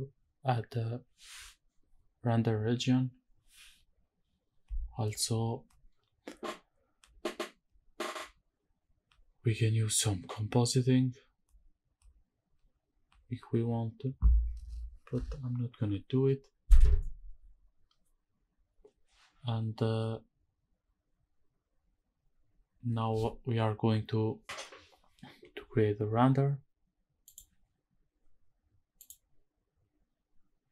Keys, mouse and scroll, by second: 27.4 click, 28.9-30.7 drag.